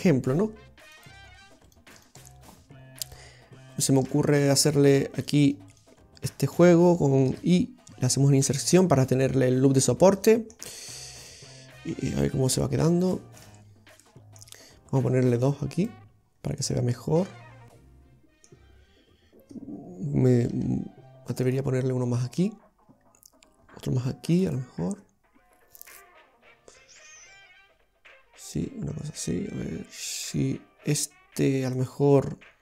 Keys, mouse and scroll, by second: 1.0 click, 1.7 right click, 2.0 shift+right click, 3.1 click, 3.8 right click, 4.1 shift+right click, 4.5 right click, 7.4 i, 9.3 middle click, 10.7-11.4 scroll up 1, 11.6-12.0 scroll up 2, 12.2-12.6 scroll down 2, 12.6 Tab, 13.2 middle click, 14.1 middle click, 15.8 click, 16.4 scroll up 1, 16.6 middle click, 20.5 ctrl+r, 24.0 ctrl+r, 31.8 click.